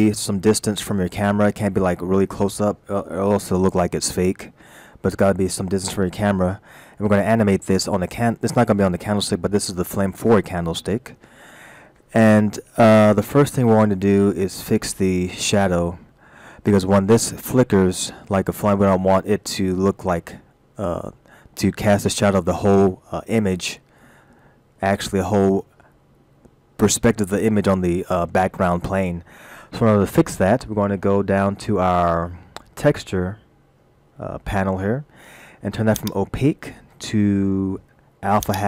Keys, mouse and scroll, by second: 0.3-1.0 scroll down 4, 1.8-3.4 scroll up 9, 4.5-5.3 scroll down 5, 6.8-7.4 scroll up 2, 32.6 scroll down 2, 36.0 click.